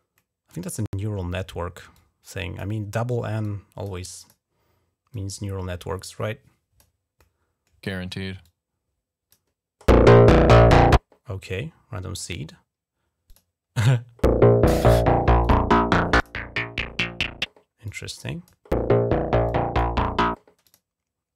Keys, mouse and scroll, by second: 0.0 middle click, 1.7 click, 2.4 right click, 3.2 click, 3.7 right click, 4.0 click, 4.1 right click, 4.9-6.6 drag, 6.6 right click, 8.2 click, 11.5 scroll up 2, 12.1 click, 13.0 click, 15.2 click, 16.0 click, 16.1 right click, 17.7 click, 18.3 right click, 19.3 click, 19.6 right click, 20.4 click.